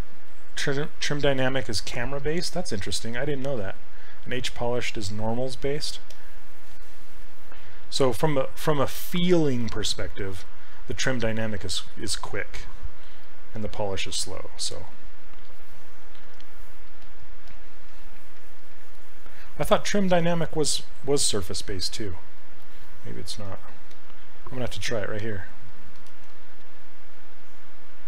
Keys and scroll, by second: 17.5 s, 23.9 s, 26.3 ctrl+z.